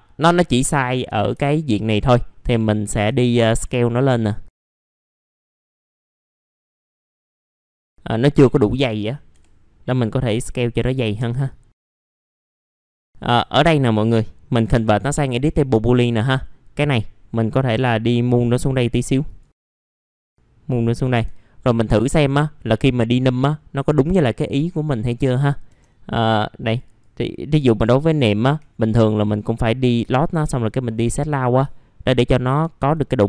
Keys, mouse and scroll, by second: 1.1 typing, 1.7-2.4 scroll down 1, 2.4-5.9 drag, 6.0 w, 6.2 click, 6.7 alt+middle click, 7.2 scroll down 1, 7.6 click, 9.3 F11, 10.1 click, 11.2 w, 11.4 click, 12.5 middle click, 12.7-13.0 scroll up 2, 13.0 F4, 13.4 alt+middle click, 14.7-15.9 middle drag, 15.9-20.9 drag, 20.9 1, 21.9 click, 22.4 middle click, 23.9 click, 27.9 ctrl+click, 30.2-31.3 drag, 31.6 alt+middle click, 33.0 middle click, 33.1-33.2 scroll down 1.